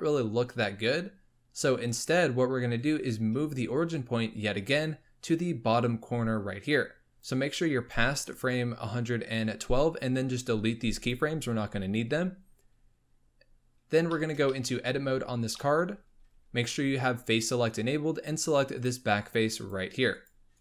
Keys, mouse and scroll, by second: 7.1-10.7 drag, 10.7 x, 14.1-14.8 shift+middle drag, 14.8 Tab, 15.5 middle click, 16.0-18.3 scroll up 1, 18.7 click, 19.1 click, 19.5 click, 20.0 click, 20.5 click.